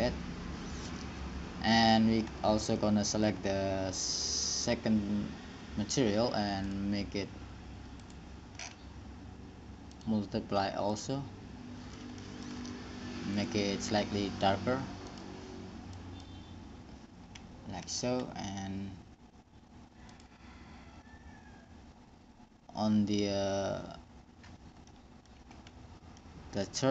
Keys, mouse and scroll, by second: 2.0-3.0 drag, 3.0-4.7 middle drag, 4.7-6.2 right drag, 6.2-7.3 drag, 12.5-13.7 middle drag, 13.7-17.0 drag, 18.0-20.4 middle drag, 20.4-22.3 drag, 25.1-26.9 middle drag.